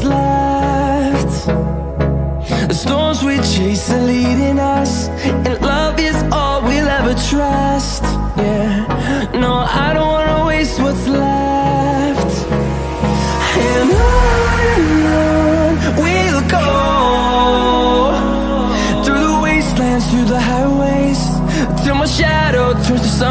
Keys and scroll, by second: 14.6 space.